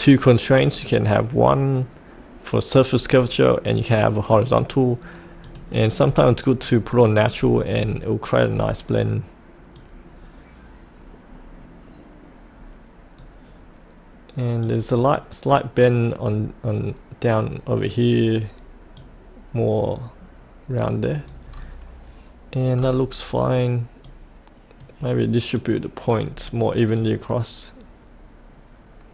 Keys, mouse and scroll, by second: 6.0-6.6 scroll up 1, 6.6 click, 7.3 scroll up 1, 8.5-9.7 scroll down 1, 9.7-21.5 drag, 21.5-22.7 scroll up 1, 22.7-24.0 scroll down 1, 24.0-29.1 drag.